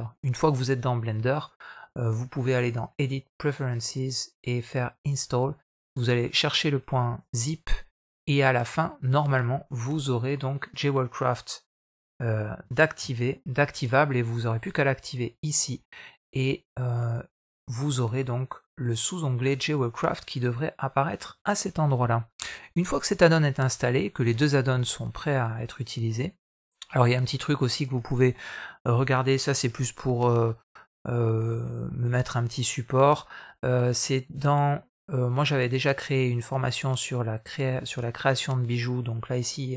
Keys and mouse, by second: 2.4-3.4 drag.